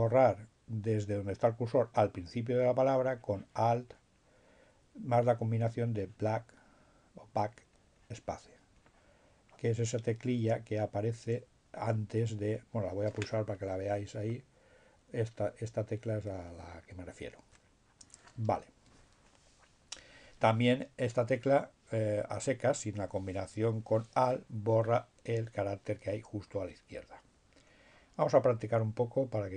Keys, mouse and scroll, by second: 3.0-5.0 drag, 5.4 click, 7.4-10.1 drag, 13.1 BackSpace.